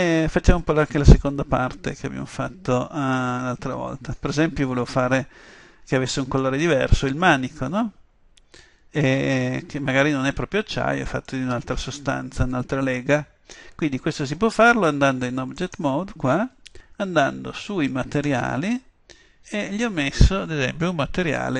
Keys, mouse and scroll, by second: 0.0 Escape, 1.2 middle click, 7.3-11.8 middle drag, 15.6-17.4 right drag, 18.3-19.9 drag.